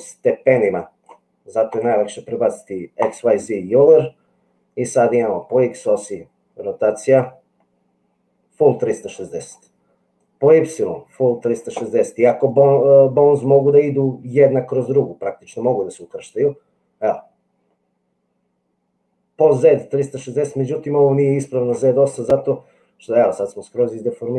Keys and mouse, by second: 1.7-3.1 drag, 5.3-9.5 drag, 10.1-13.6 drag, 15.4-21.9 drag.